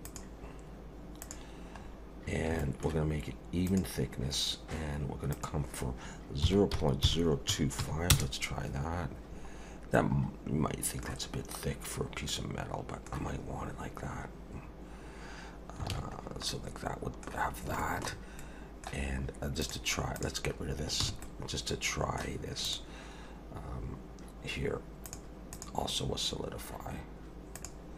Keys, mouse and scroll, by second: 0.0 click, 1.8-2.5 scroll up 3, 2.6 shift+middle click, 3.7 click, 4.2 scroll up 1, 5.3 click, 9.6 scroll up 1, 9.9 middle click, 12.3 middle click, 14.1-15.4 scroll down 1, 15.9 alt+a, 16.2 scroll down 1, 16.5 middle click, 17.4-17.7 scroll down 3, 17.8 shift+middle click, 18.4 middle click, 19.1 scroll up 2, 19.6 click, 20.2 click, 21.0 h, 21.2 middle click, 22.6 click, 25.0 click, 25.5 click.